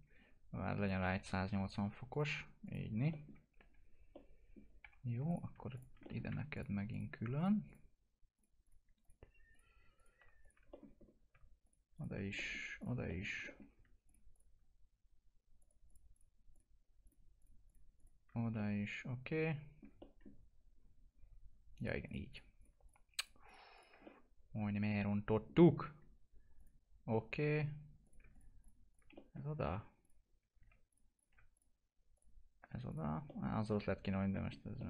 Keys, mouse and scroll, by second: 0.8 click, 1.1 typing, 2.1 click, 3.1 alt+middle click, 3.7 F4, 4.1 middle click, 4.8 F4, 5.2 click, 5.7 ctrl+click, 6.0 alt+middle click, 6.5 ctrl+click, 10.7 middle click, 11.0 scroll up 1, 11.6 ctrl+click, 12.3 middle click, 12.7 ctrl+click, 13.0 middle click, 13.2 scroll down 1, 13.4 alt+middle click, 14.0 ctrl+click, 18.8-19.9 alt+middle drag, 21.7 ctrl+click, 24.0 alt+middle click, 26.5 click, 28.0 click, 29.1 alt+middle click, 30.0 ctrl+click, 33.2 alt+middle click, 33.6-34.0 scroll up 1, 34.3 middle click, 34.5 scroll down 1, 34.7 alt+middle click.